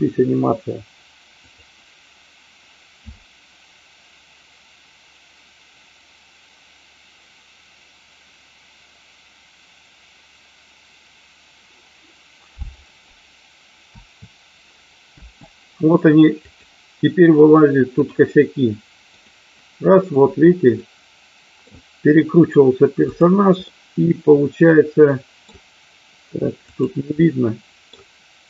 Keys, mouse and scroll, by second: 1.3 click, 16.4 click, 19.2 click, 20.8-21.7 middle drag, 23.0 click, 23.7-25.4 middle drag, 26.5 click, 27.2-27.8 middle drag.